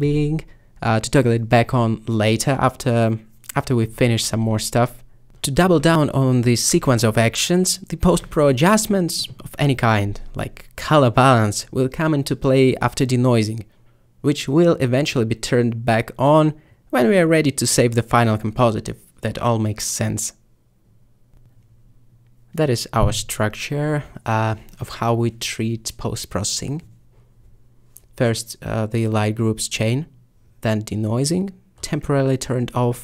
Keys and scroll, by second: 0.1 g, 2.4 a, 21.5 m, 22.8 m, 25.3 m, 31.8 m, 32.8 m.